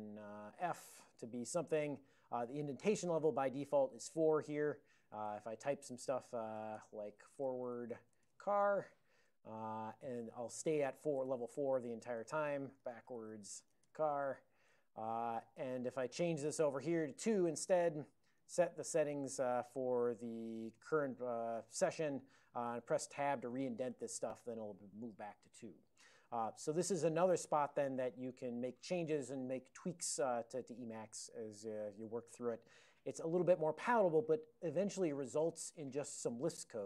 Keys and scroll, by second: 1.5-2.2 typing, 5.5 9, 7.0-9.2 typing, 9.3 Return, 10.7 ctrl+a, 11.3 Tab, 12.1-15.2 typing, 15.5 ctrl+a, 16.0 alt+o, 17.0 BackSpace, 17.2 BackSpace, 18.5 ctrl+c, 18.7 ctrl+c, 21.9 alt+o, 21.9 y, 22.5 ctrl+p, 23.6 Tab, 24.1 ctrl+n, 24.5 Tab, 26.5 alt+o.